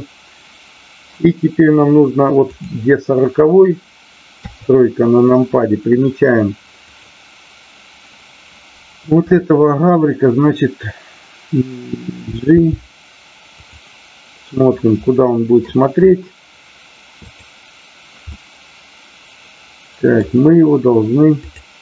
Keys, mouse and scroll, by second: 2.6 click, 4.3 KP_3, 6.8 click, 14.9-15.6 middle drag, 17.3 click, 18.2-20.1 middle drag, 21.3 click.